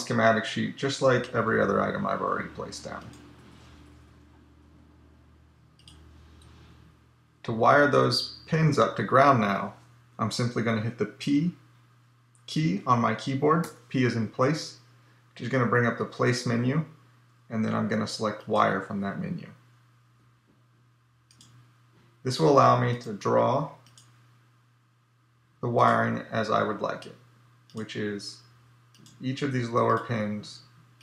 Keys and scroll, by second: 13.1 p.